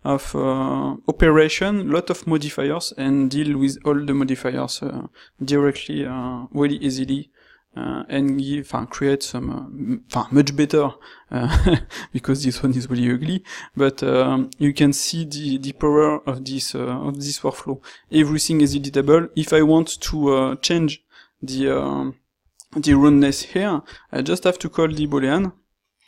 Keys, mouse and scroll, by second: 23.1 ctrl+shift+q.